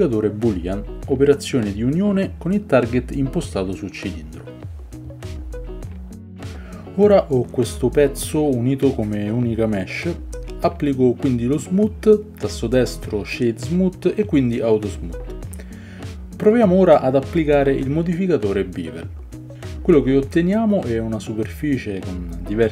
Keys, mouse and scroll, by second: 1.7-5.1 middle drag, 5.1-5.7 drag, 5.7-6.4 middle drag, 6.3 Delete, 6.4-7.4 right drag, 6.8 Tab, 9.7 middle click, 9.7 right click, 10.1 a, 10.2 a, 10.6 Tab, 12.8-18.1 middle drag, 12.8-18.1 right drag, 18.1 click, 20.4-21.7 drag.